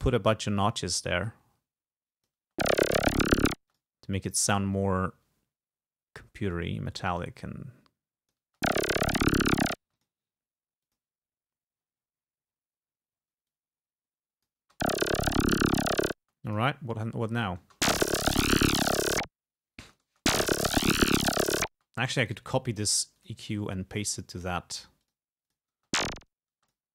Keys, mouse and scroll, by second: 0.6-1.3 scroll up 2, 1.8 click, 2.4 space, 3.7 space, 3.8 click, 4.6 click, 5.5-6.0 scroll up 1, 6.2-6.9 scroll up 1, 6.9 scroll up 1, 8.5 click, 8.5 space, 9.9 space, 10.0 click, 10.9 click, 11.6-13.4 scroll up 2, 13.5-14.7 drag, 14.7 space, 16.3 space, 16.5 click, 17.4 click, 17.7 space, 19.9 space, 21.8 space, 22.3 right click, 23.2 click, 24.2 scroll up 2, 25.1 click, 25.5 click, 25.8 space, 26.6 space, 26.7 click.